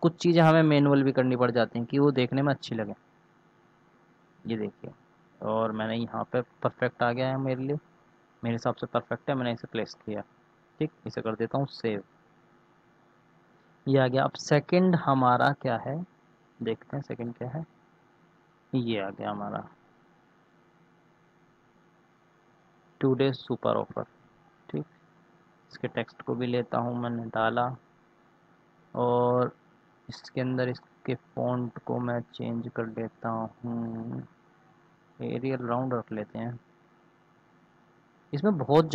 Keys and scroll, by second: 11.1 ctrl+s, 21.6 ctrl+c, 27.0 ctrl+v, 28.3 ctrl+a.